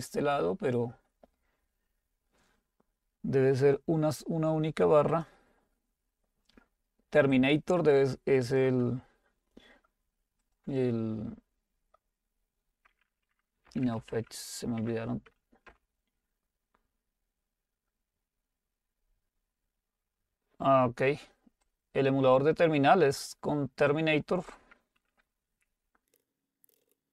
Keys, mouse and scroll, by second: 5.6 click, 7.4-10.1 drag, 10.9 click, 13.5-14.6 typing, 14.8 Tab, 15.7 typing, 21.7-25.4 drag, 25.9-27.1 typing.